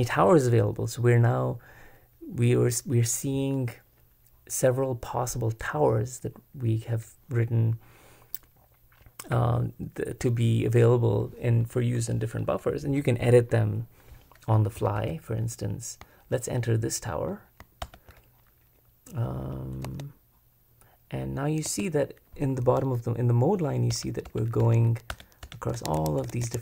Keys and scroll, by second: 14.5 k, 14.7 k, 14.9 k, 16.9 typing, 17.8 super+Return, 19.9 Escape, 21.6 Escape, 23.9 Return, 24.2 Return, 24.6 Return.